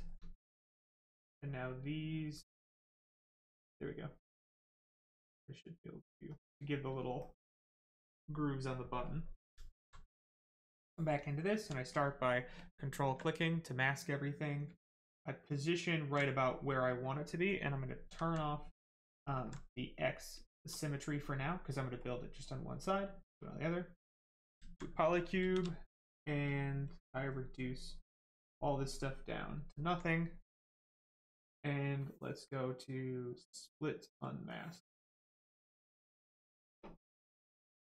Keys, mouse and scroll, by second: 0.7 shift+click, 1.3 right click, 2.5 click, 6.4 right click, 9.5 alt+right click, 12.5 ctrl+click, 15.4 alt+click, 16.2 right click, 18.7 click, 19.7 alt+right click, 21.9 shift+click, 24.3 right click, 24.7 alt+right click, 25.2 shift+right click, 25.4 shift+f, 26.3 click, 27.3 right click, 28.3 click, 29.3 right click, 34.2 click, 36.4 alt+click, 37.3 alt+click.